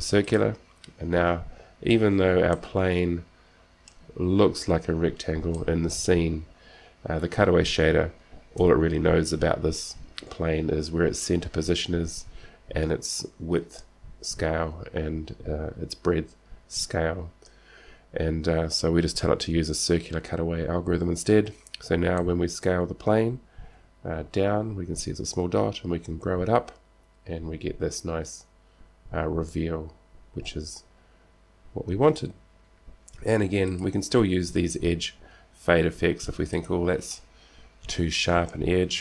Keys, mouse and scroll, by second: 2.7-8.0 middle drag, 4.9-5.5 scroll up 1, 8.8 KP_7, 9.7 middle click, 9.7-10.5 scroll down 2, 10.4 middle click, 21.7-24.2 middle drag, 21.7-22.4 scroll down 1, 24.0 s, 36.4 s.